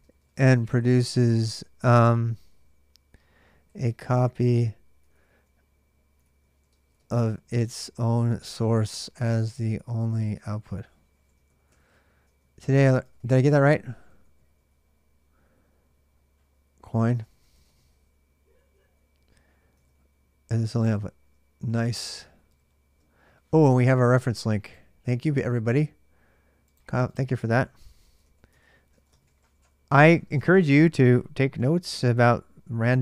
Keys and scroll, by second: 0.0-2.1 typing, 3.2-20.4 typing, 20.7 ctrl+[, 20.7 ctrl+j, 21.8 ctrl+[, 21.9 ctrl+j, 22.1-22.4 typing, 27.4-30.0 typing, 30.2 Return, 30.5 Return, 32.7 shift+8, 32.8 space.